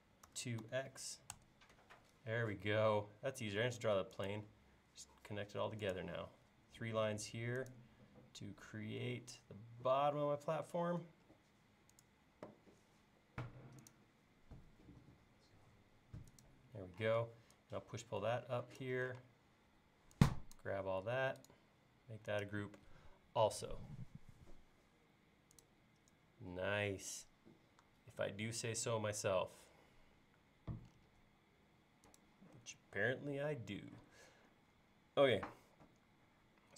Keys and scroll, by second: 0.3-0.7 typing, 2.9 l, 6.2 l, 12.4 l, 17.1 p, 19.2 space, 30.3 l.